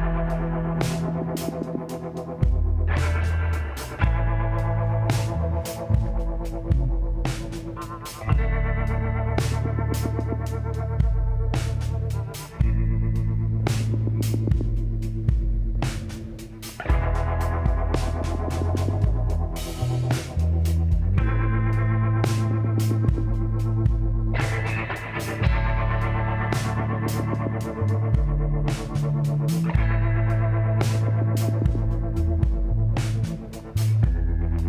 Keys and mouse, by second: 0.5 s, 3.2-8.7 drag, 7.7-8.7 middle drag, 8.5 KP_7, 10.0-11.9 drag, 13.3-14.7 drag, 15.1 s, 18.0 KP_1, 18.8 KP_3, 25.3-27.2 drag, 28.7 middle click, 31.1 shift+d, 33.2 r.